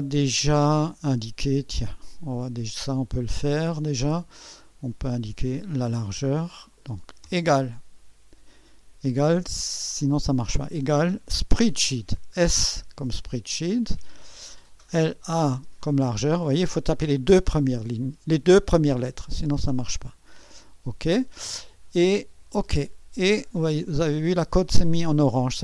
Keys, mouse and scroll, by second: 1.7-2.8 drag, 4.5 click, 7.2 =, 11.5 s, 13.3 click, 14.3 click, 14.3-15.5 typing, 19.3 click, 20.5 click, 22.5 click, 23.4 click.